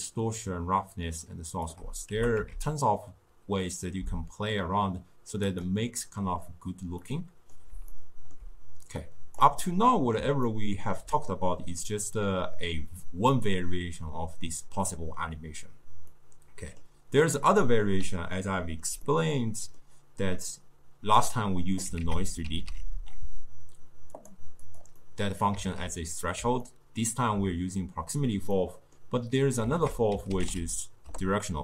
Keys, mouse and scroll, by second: 2.2 g, 7.1-9.1 middle drag, 9.1 click, 9.7 middle click, 10.5-13.6 ctrl+middle drag, 16.2-22.1 middle drag, 22.1 ctrl+a, 25.1-29.8 middle drag, 29.8 ctrl+a.